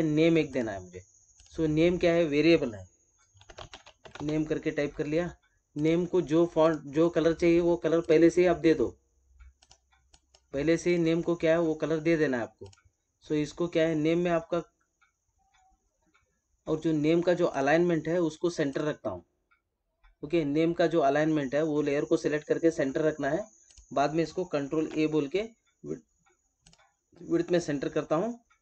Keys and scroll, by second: 24.6 ctrl+a.